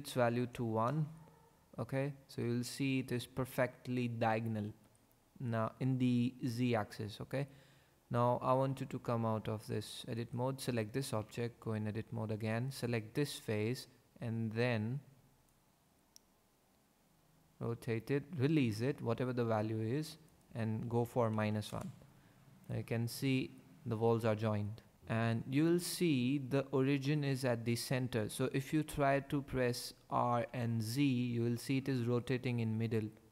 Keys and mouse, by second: 8.9 Tab, 10.1 click, 11.2 Tab, 15.6 click, 20.3 click, 24.9 ctrl+z, 25.7 click, 30.3 r, 30.8 z.